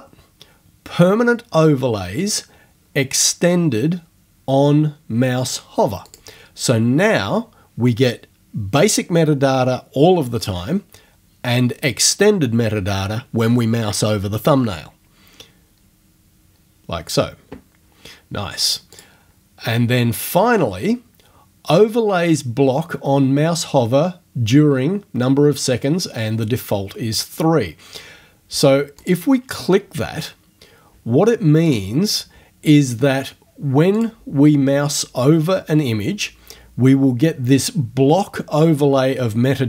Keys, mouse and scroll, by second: 6.1 click, 18.9 click, 29.0 click, 31.7 click, 34.0 click.